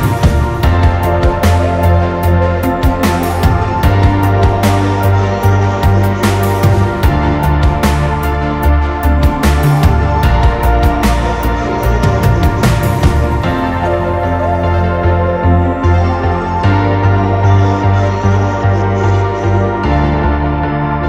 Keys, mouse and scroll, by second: 0.0 scroll down 2, 0.2 scroll up 1, 0.3 middle click, 0.8 middle click, 1.3 scroll up 6, 1.5 double click, 1.9 Delete, 2.1 middle click, 2.4 middle click, 2.5-2.9 scroll up 10, 3.0 Delete, 3.1 scroll down 7, 3.2 middle click, 3.5 middle click, 4.0 middle click.